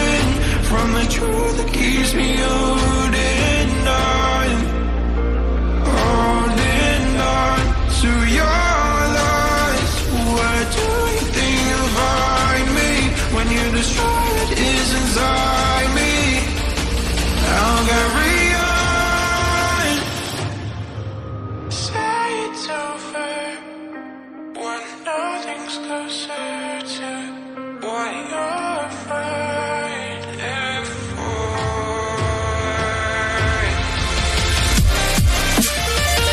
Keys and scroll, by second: 8.8 ctrl+z, 10.7 ctrl+z, 10.7 ctrl+d, 15.1 ctrl+d, 15.6 Right, 18.1 Left, 19.0 Left, 19.4 Left.